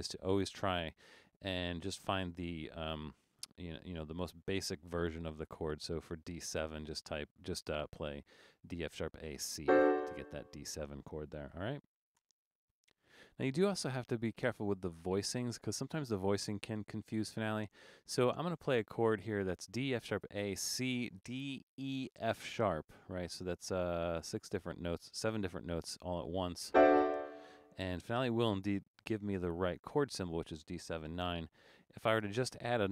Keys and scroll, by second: 11.6 BackSpace, 12.2 BackSpace, 31.4 BackSpace, 32.2 BackSpace.